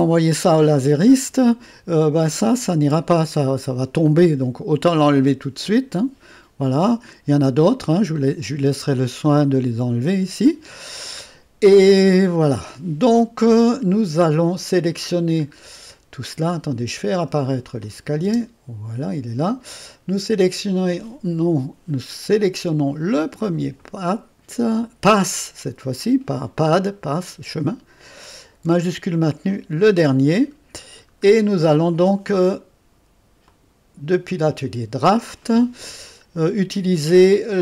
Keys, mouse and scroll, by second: 1.2-3.4 scroll up 1, 3.4-4.3 scroll up 1, 4.7 click, 5.9 Delete, 6.8-7.9 middle drag, 8.2-9.4 middle drag, 8.9 click, 9.4 drag, 9.5-10.4 right drag, 11.7 click, 11.9 right click, 16.2-17.8 scroll up 1, 17.8 click, 18.3 space, 20.6 click, 26.0-29.7 drag, 30.6 middle click, 31.1-32.4 middle drag, 33.4 click, 34.6 click.